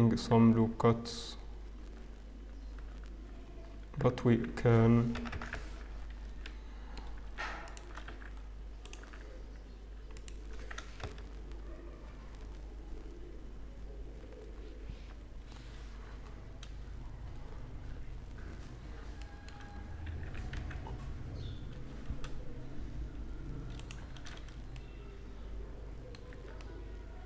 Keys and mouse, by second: 1.7 z, 2.8 z, 3.6 click, 4.1 z, 5.0 ctrl+KP_Add, 5.2 ctrl+KP_Add, 6.2 Escape, 8.0 x, 10.9 ctrl+KP_Add, 11.5 ctrl+KP_Add, 12.0 ctrl+KP_Add, 12.4 ctrl+KP_Add, 14.1 ctrl+KP_Add, 16.1 middle click, 16.3 middle click, 19.1-20.7 middle drag, 20.2 e, 24.0 a, 24.2 a, 24.6-27.1 middle drag, 26.2 Tab.